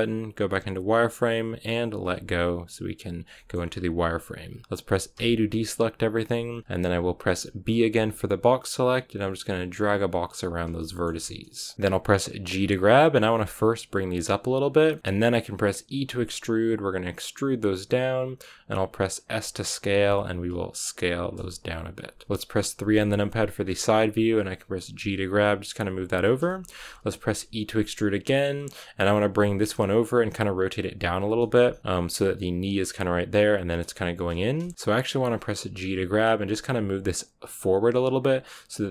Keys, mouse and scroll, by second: 2.0 z, 3.3 shift+middle click, 3.5-5.0 scroll up 1, 5.0 a, 10.0 r, 10.7-12.4 shift+middle drag, 12.4 g, 14.8 shift+middle click, 15.0 s, 15.8 e, 20.0 s, 21.4 g, 22.2 KP_1, 22.8 KP_3, 23.5-24.9 scroll up 4, 24.9 g, 25.8 r, 26.3 shift+middle click, 26.7-27.2 scroll down 1, 27.2 r, 28.9 r, 29.5 g, 30.2 r, 31.3 shift+middle click, 31.4 scroll up 2, 31.7 g, 31.8 r, 34.6 shift+middle click, 34.7 scroll up 1, 35.6 g.